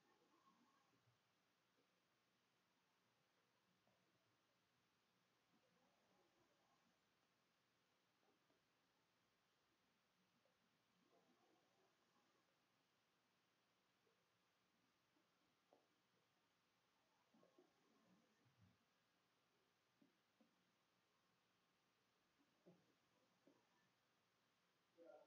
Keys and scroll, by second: 0.1-6.4 typing, 2.6 Tab, 7.6-9.1 typing, 10.8-22.5 typing, 22.4 Delete, 24.3 BackSpace.